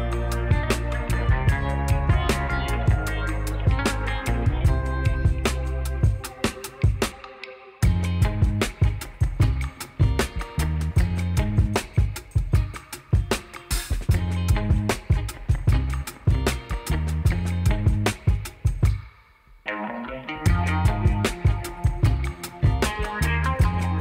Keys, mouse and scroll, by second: 0.4-0.9 drag, 8.3 space, 10.8 space, 18.5-20.2 drag.